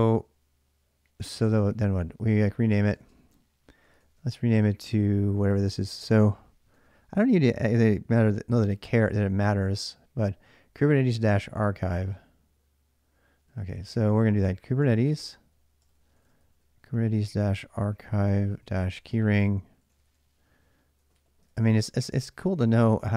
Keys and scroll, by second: 2.4-3.5 typing, 3.8 ctrl+a, 4.0 ctrl+a, 14.4-23.1 typing, 22.6 ctrl+a.